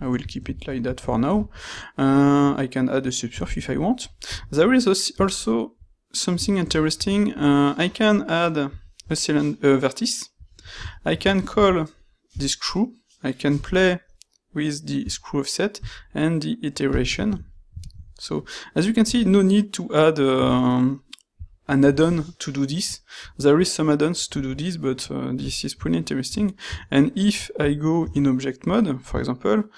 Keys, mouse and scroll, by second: 0.6 shift+middle drag, 1.0 ctrl+middle drag, 1.4-2.4 shift+middle drag, 2.4-3.0 right drag, 3.0-3.4 middle drag, 4.2 q, 11.5 ctrl+shift+q.